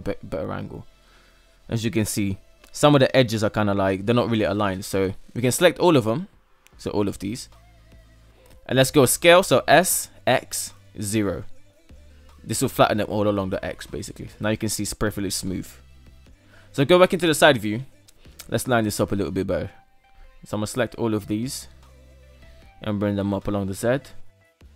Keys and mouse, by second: 0.3-0.7 shift+middle drag, 1.2-2.0 middle drag, 3.6 Tab, 4.1 right click, 4.9 ctrl+right click, 5.3 ctrl+right click, 6.2 ctrl+right click, 6.7 ctrl+right click, 7.2 shift+middle click, 7.7 ctrl+right click, 8.7 s, 12.6 Tab, 13.3-15.5 middle drag, 15.9 KP_3, 17.6 Tab, 18.5 KP_1, 18.7 right click, 19.6 shift+right click, 20.0 shift+right click, 20.5 shift+right click, 21.1 shift+right click, 22.3-24.3 typing, 24.5 Tab, 24.5 middle click.